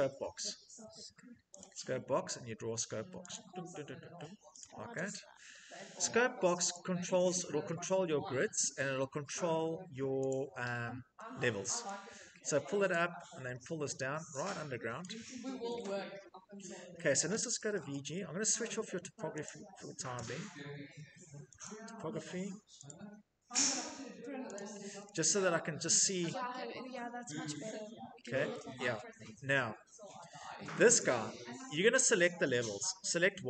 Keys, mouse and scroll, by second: 1.4 click, 3.1 click, 4.4 click, 6.6 click, 8.0 middle click, 8.3 scroll, 10.1 right click, 10.5 scroll, 12.7 click, 14.8 click, 16.7 shift+middle click, 17.2-18.1 typing, 19.2 click, 20.0 t, 21.4 click, 24.3 click, 25.0 scroll, 25.9 middle click, 28.3 shift+middle click, 28.5 middle click, 28.6 middle click, 30.7 click, 31.5 middle click, 31.5 middle click, 31.7 Escape, 33.0 Tab.